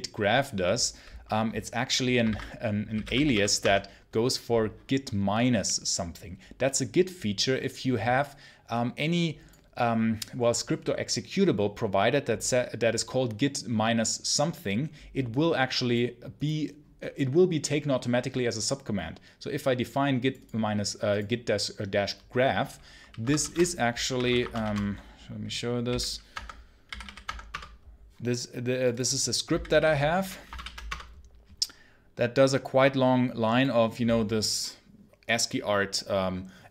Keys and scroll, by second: 2.1 ctrl+c, 2.5-3.7 typing, 23.1 Escape, 23.4-27.4 typing, 26.2 Tab, 29.1-30.1 typing, 30.4 shift+Insert, 30.8 Return.